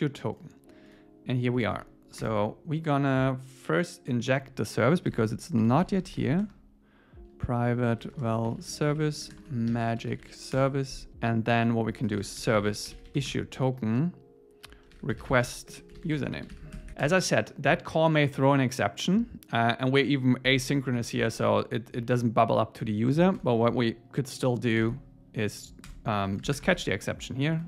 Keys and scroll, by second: 2.2 Return, 10.6 Return, 13.3 Return, 16.7 Escape, 16.9 super+Right, 20.5 Left, 21.0 Down, 22.0 Up, 23.4 Return, 24.8 super+z, 25.5 Right, 25.9 Return, 26.8 alt+8.